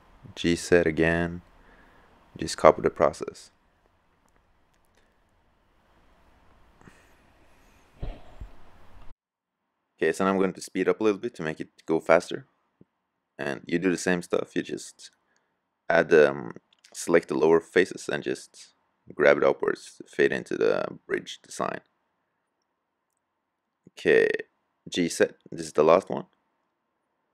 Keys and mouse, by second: 4.0-5.1 drag, 5.1-6.6 middle drag, 6.6-9.3 drag, 9.3 g, 10.8 middle click, 11.1 middle click, 11.9 click, 12.2 g, 13.2 click, 14.0 middle click, 14.5 click, 14.7 g, 15.8 click, 16.2 right click, 16.8 click, 17.0 g, 18.0 click, 18.4 right click, 18.5 middle click, 18.7 click, 19.0 click, 19.6 g, 20.9-22.3 drag, 24.4 g.